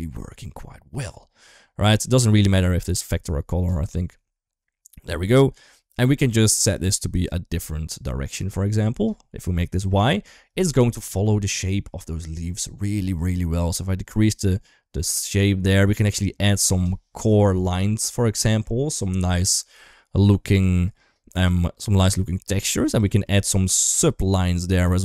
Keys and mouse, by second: 2.4-3.0 drag, 6.4-7.1 drag, 9.3 middle drag, 10.5 middle drag, 11.5 shift+middle drag, 11.8 middle click, 13.2-16.4 shift+drag, 17.1 shift+middle drag, 17.8-18.4 middle drag, 21.2-21.8 drag, 23.0 middle click, 24.7-25.0 shift+drag.